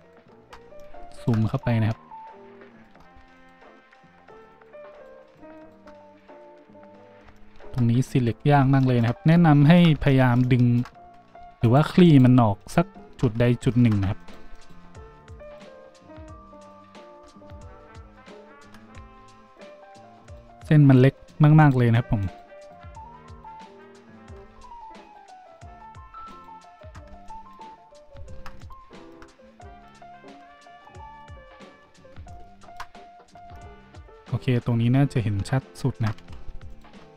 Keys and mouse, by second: 0.0 alt+shift+right click, 8.3 z, 11.0 z, 11.6 alt+shift+click, 11.6 alt+shift+middle click, 11.6 alt+shift+right click, 12.0 alt+shift+click, 12.0 alt+shift+middle click, 12.0 alt+shift+right click, 12.6 alt+shift+click, 12.6 alt+shift+middle click, 12.6 alt+shift+right click, 13.7 ctrl+z, 14.2 alt+shift+click, 14.2 alt+shift+middle click, 14.2 alt+shift+right click, 14.5 alt+shift+click, 14.5 alt+shift+middle click, 14.5 alt+shift+right click, 15.2 alt+shift+click, 15.2 alt+shift+middle click, 15.2 alt+shift+right click, 15.4 alt+shift+click, 15.4 alt+shift+middle click, 15.4 alt+shift+right click, 16.5 alt+shift+click, 16.5 alt+shift+middle click, 16.5 alt+shift+right click, 17.0-19.5 alt+shift+drag, 19.5 alt+shift+middle click, 19.6-20.2 alt+shift+drag, 20.2 alt+shift+middle click, 20.3-21.1 alt+shift+drag, 21.1 alt+shift+middle click, 21.3 alt+shift+click, 21.6 alt+shift+middle click, 21.7-26.1 alt+shift+drag, 22.2 alt+shift+middle click, 22.2 alt+shift+right click, 22.5 alt+shift+middle click, 22.5 alt+shift+right click, 23.3 alt+shift+middle click, 23.3 alt+shift+right click, 23.6 alt+shift+middle click, 23.6 alt+shift+right click, 25.0 alt+shift+middle click, 25.0 alt+shift+right click, 25.4 alt+shift+middle click, 25.4 alt+shift+right click, 26.3 alt+shift+middle click, 26.6 alt+shift+middle click, 30.4-37.1 drag, 30.4 z, 31.7 z, 33.4 shift+z, 36.4 shift+z, 36.7 alt+shift+middle click, 36.7 alt+shift+right click.